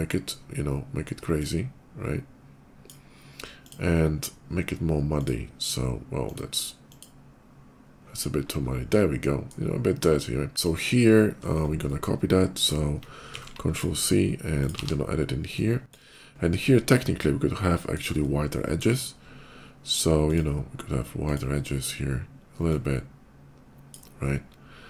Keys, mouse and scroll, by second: 1.2-2.7 drag, 3.5 click, 4.9 click, 6.0 click, 6.6 click, 9.1 middle click, 9.5 scroll up 1, 11.4 middle click, 11.6 middle click, 13.2 ctrl+c, 13.4 click, 14.4 click, 14.6 ctrl+v, 16.5 click, 17.6 middle click, 18.1 shift+middle click, 20.0 shift+click, 21.0 shift+click, 22.4-23.8 drag, 24.7 middle click.